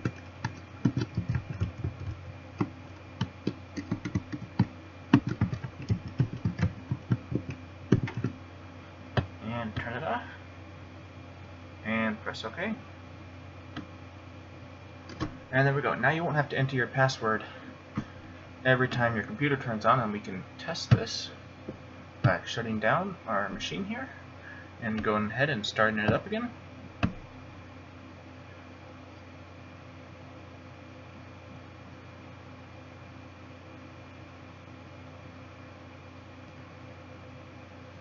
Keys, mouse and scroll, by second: 10.1 click.